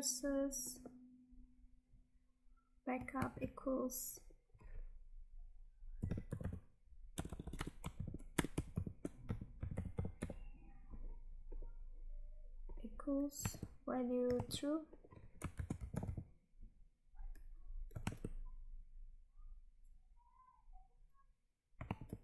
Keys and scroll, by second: 3.3 Tab, 13.6 Tab, 18.2 Tab, 22.0 Tab.